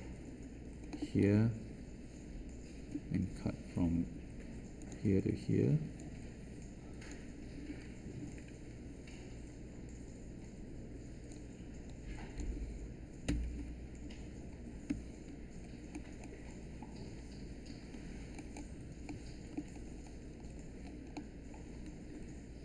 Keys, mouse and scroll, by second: 13.2 Return, 14.8 3.